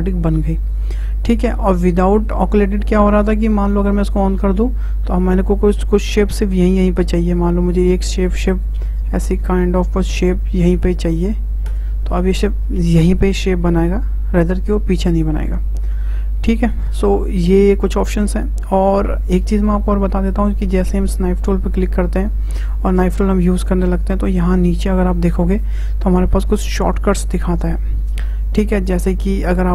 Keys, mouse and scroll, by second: 0.2 `, 4.1 click, 7.4-10.4 drag, 13.5-16.2 middle drag, 21.8-25.9 drag.